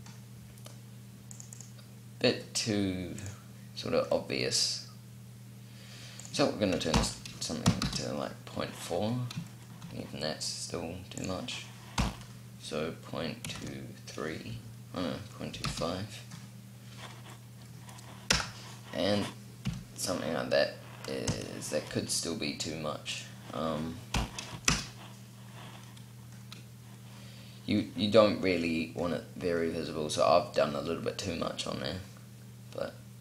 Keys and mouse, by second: 1.0-3.2 drag, 3.2-6.0 middle drag, 6.0-7.8 drag, 8.7 middle click, 10.9-13.2 drag, 18.1 KP_0, 19.4 p, 21.1 p, 25.7-26.9 middle drag, 31.1-33.2 middle drag.